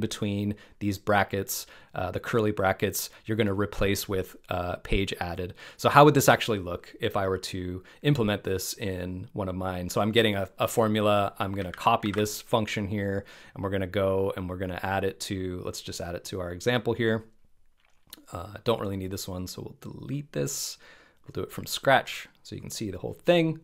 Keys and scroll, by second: 11.7 super+a, 12.0 super+c.